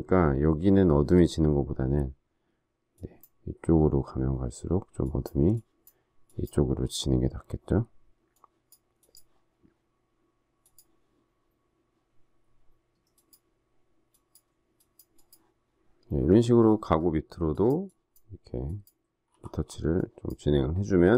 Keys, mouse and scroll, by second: 19.3 typing.